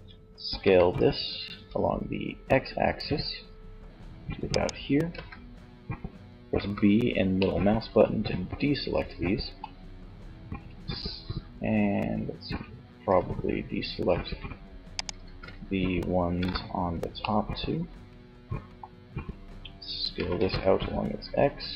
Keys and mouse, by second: 3.9 click, 4.3 z, 5.7 b, 8.6 click, 12.2 s, 14.5 ctrl+z, 15.8 b, 19.3 s.